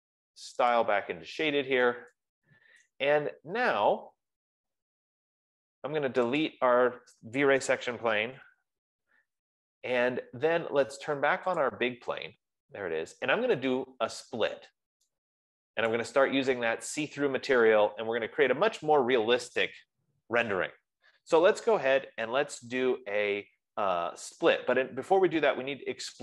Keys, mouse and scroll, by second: 5.0 right click, 5.0 scroll, 6.4-6.8 scroll, 7.2 click, 8.2-9.3 typing, 12.1 click, 14.3-15.4 scroll, 16.8 right click, 17.2-19.7 scroll.